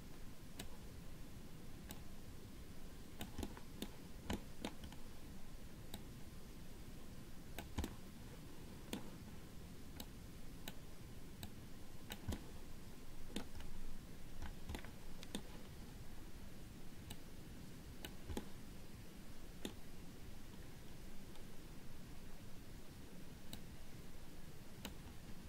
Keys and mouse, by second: 2.2-3.5 drag, 3.6 middle click, 4.6 middle click, 6.1-7.8 drag, 8.1-9.3 middle drag, 10.2 click, 11.7 click, 12.6 middle click, 15.0 middle click, 17.5 click, 18.6-19.8 middle drag, 23.7-25.2 drag.